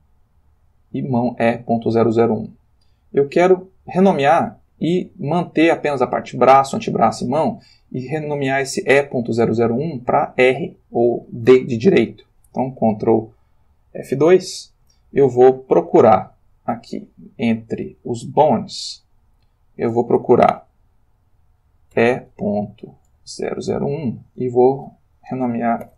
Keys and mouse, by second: 0.3 click, 2.4 shift+click, 3.1 shift+click, 14.5 ctrl+F2, 17.1 click, 18.4 click, 19.5 click, 21.9 shift+e, 23.4 0, 23.9 1, 24.3 Tab, 25.8 shift+r.